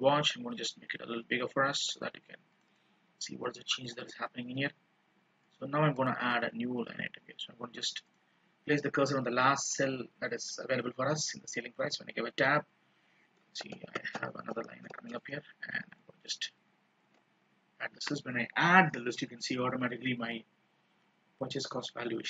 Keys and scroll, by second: 16.2 ctrl+shift+Down, 17.2 ctrl+d.